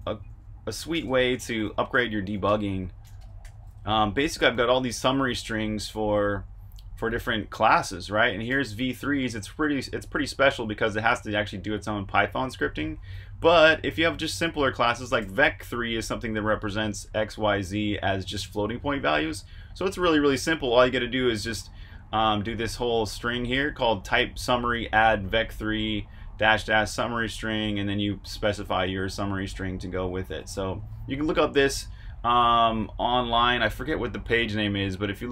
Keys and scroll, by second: 0.5-4.3 typing, 7.9-8.9 typing, 12.9 Escape, 13.0-15.1 typing, 19.4 f, 22.0-23.3 typing, 27.7-30.7 typing.